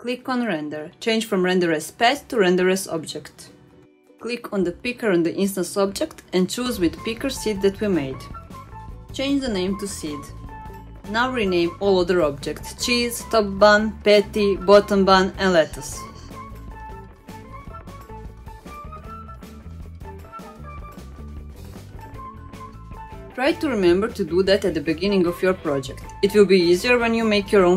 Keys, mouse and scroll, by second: 1.0 click, 1.3 click, 2.2-3.3 drag, 3.7 scroll down 2, 4.7-6.2 scroll down 2, 6.2 click, 8.7 middle click, 9.3 click, 9.9 click, 10.8-12.2 drag, 11.8 e, 12.4 click, 13.3 click, 14.5 click, 14.8-16.9 shift+drag, 16.5 e, 18.2 click, 19.1 click, 19.2-27.2 shift+drag, 27.3 Return.